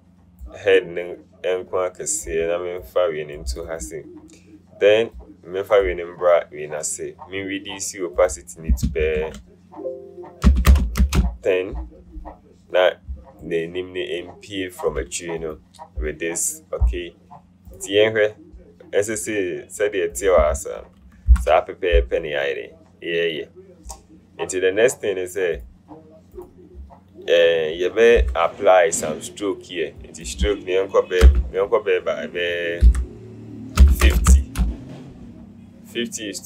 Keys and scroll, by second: 9.4 ctrl+a, 10.6 KP_1, 10.8 KP_0, 11.1 Return, 21.4 ctrl+0, 28.4 u, 31.4 KP_1, 32.9 BackSpace, 33.9 KP_5, 34.1 KP_0, 34.5 Return.